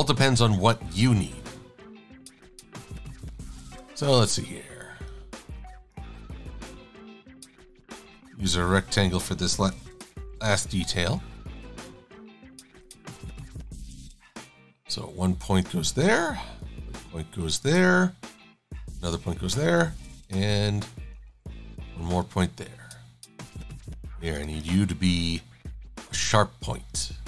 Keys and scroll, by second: 10.1 super+=, 21.6 shift+x.